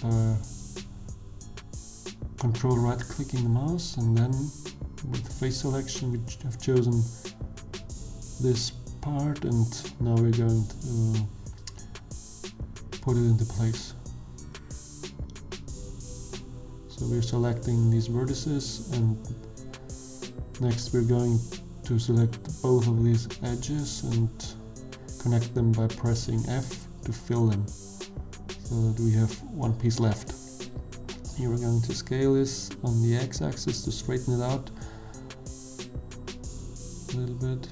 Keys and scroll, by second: 2.0 3, 3.7 shift+d, 8.9 1, 11.6 b, 13.7 g, 17.5 g, 23.4 g, 25.0 2, 27.4 f, 29.5 1, 31.4 s, 33.1 x, 36.9 g.